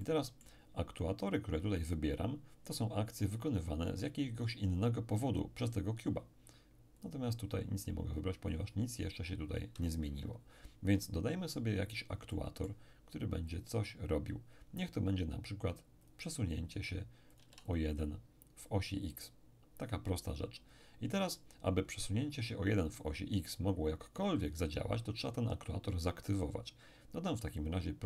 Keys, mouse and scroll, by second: 0.0-1.4 middle drag, 7.0 click, 10.0 Escape, 11.6-12.3 scroll down 1, 12.3-14.5 middle drag, 13.5 click, 16.0 click, 17.3-18.7 drag, 17.4 1, 21.1-22.1 scroll down 1, 27.6-28.0 drag.